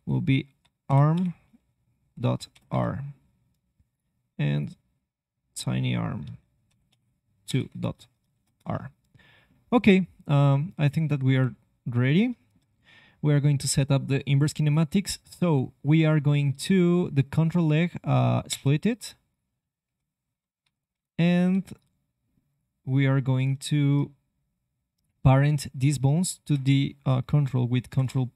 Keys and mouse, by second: 3.9-8.5 drag, 9.4-11.3 middle drag, 11.3 alt+h, 18.4 y, 19.3-21.3 drag, 19.8 g, 21.4 c, 27.8 ctrl+p.